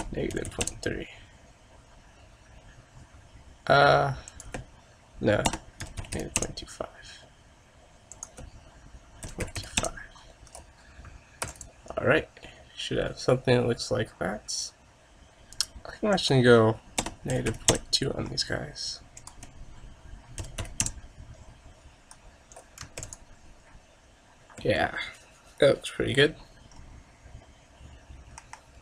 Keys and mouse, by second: 28.6 KP_0.